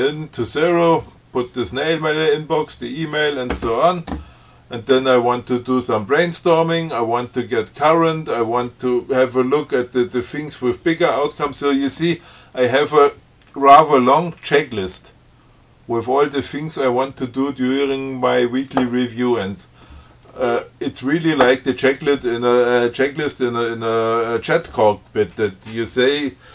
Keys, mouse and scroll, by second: 6.6 scroll down 2, 7.6 scroll down 2, 8.3-8.9 scroll down 4, 12.5-13.0 scroll up 4, 15.1-16.4 scroll down 5, 16.9 scroll down 1, 17.1 scroll up 1, 18.0 scroll up 1, 19.1-19.5 scroll up 1, 20.6 scroll up 1.